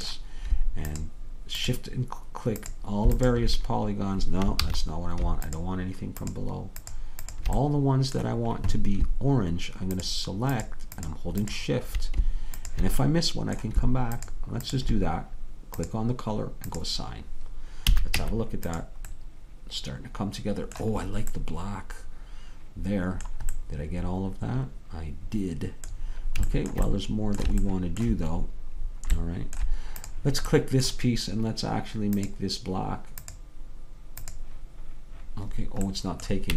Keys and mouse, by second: 4.7 ctrl+z, 7.9-9.9 drag, 7.9-9.9 middle drag, 15.3-18.6 drag, 18.0 a, 18.2 Tab, 19.2-25.9 middle drag, 27.8-31.3 middle drag, 31.3-35.9 drag, 35.9 middle click.